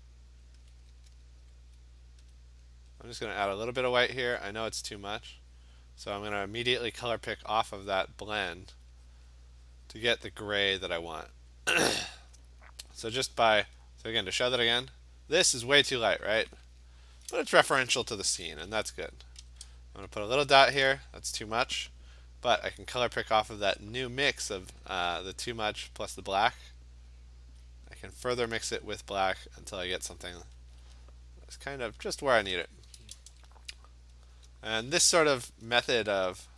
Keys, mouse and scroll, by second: 0.6 alt+click, 2.4 click, 3.1 click, 4.1 alt+click, 5.4 click, 5.8 click, 7.1 alt+click, 7.9 click, 8.0 click, 8.7 alt+click, 9.2 click, 9.4 click, 10.0 click, 10.4 click, 10.8 alt+click, 11.7 click, 12.4 click, 15.8 alt+click, 16.4 alt+click, 18.4-19.7 typing, 20.4 click, 24.2 click, 25.7 click, 26.0 click, 26.2 click, 26.2 click, 27.7 click, 29.2 click, 30.0 alt+click, 30.2 alt+click, 30.8 click, 30.9 alt+click, 31.7 click, 32.2 alt+click, 33.2 ', 33.3 ', 34.8 click.